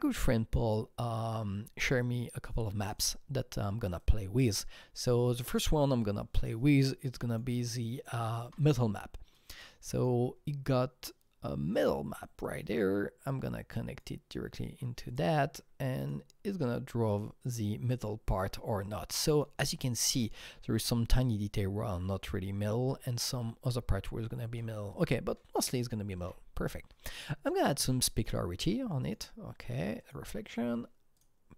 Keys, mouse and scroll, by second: 3.0 double click, 4.0-9.4 drag, 8.4 alt+Tab, 9.4-16.0 drag, 16.0-18.9 drag, 19.3 click, 20.2-21.8 scroll up 6, 21.8-22.9 scroll down 9, 22.9 alt+middle click, 23.4-24.3 scroll up 4, 24.6-29.0 alt+middle drag, 26.2 alt+Tab, 27.7-29.0 drag, 30.0-31.2 drag, 31.2 click.